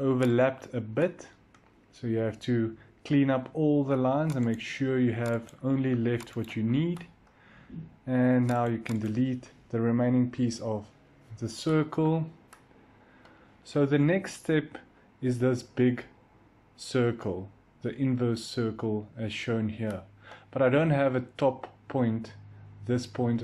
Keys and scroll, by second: 10.5 Delete.